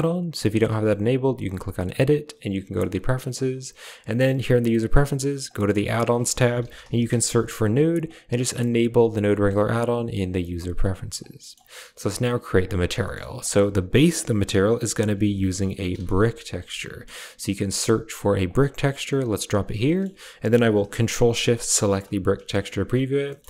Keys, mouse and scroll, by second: 1.8-2.9 drag, 11.2 click, 11.2 middle click, 12.5 click, 12.9 click, 12.9 middle click, 13.3 shift+a, 19.7 middle click, 21.6 ctrl+shift+click, 22.4 shift+middle drag, 23.2 shift+middle click.